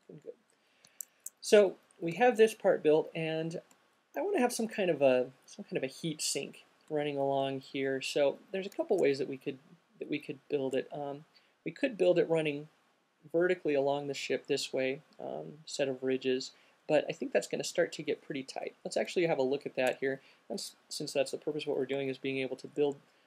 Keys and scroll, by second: 1.3 alt+shift+q, 18.8 space, 19.2 space.